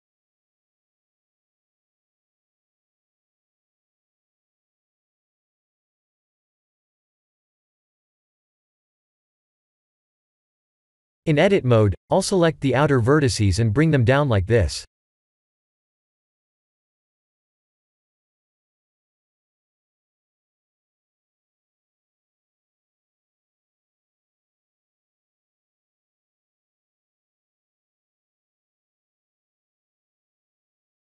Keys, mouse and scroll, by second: 1.2 scroll up 2, 1.6-2.0 shift+middle drag, 2.2 scroll up 3, 2.6 scroll down 1, 2.6-3.2 scroll up 2, 3.2 g, 5.0-5.9 right drag, 6.0-7.2 middle drag, 7.3 g, 9.5-11.3 middle drag, 11.5 Tab, 11.8-12.3 middle drag, 12.7 1, 12.9 click, 13.8 shift+click, 14.9 shift+click, 15.9 ctrl+z, 16.5 shift+click, 17.5 shift+click, 18.3 shift+click, 19.2 g, 21.5 Tab, 22.7-24.5 middle drag, 24.9 click, 25.2-25.8 scroll down 5, 26.6-27.1 middle drag, 27.4 click, 28.7-29.9 drag, 30.3 click, 30.7-31.1 middle drag.